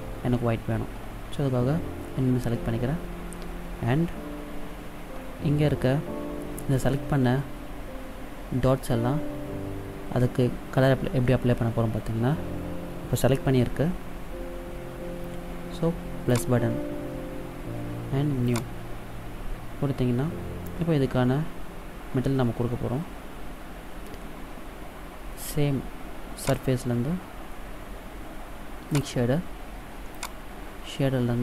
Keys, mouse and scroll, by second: 16.5 click, 18.6 click, 26.6 click, 30.3 click.